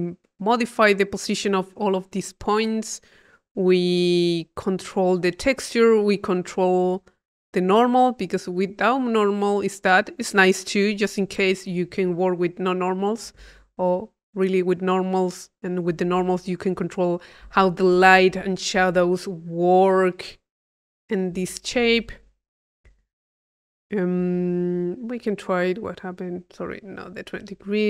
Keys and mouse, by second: 3.7 middle click, 4.9-6.2 drag, 6.5 click, 7.6 click, 8.7 click, 13.2 click, 13.7 click, 22.5-23.6 drag, 25.3 click, 26.0 click, 26.8 click, 27.5 click.